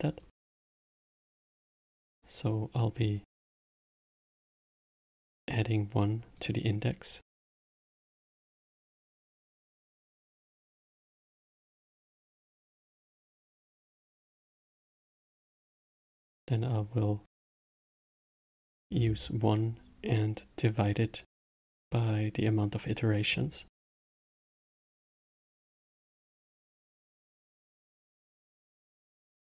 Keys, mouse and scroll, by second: 0.6-3.1 middle drag, 3.1-5.4 drag, 7.2-9.9 drag, 13.1 shift+d, 14.4 click, 15.6-20.6 drag, 20.7 click, 26.7 click, 27.8 shift+d.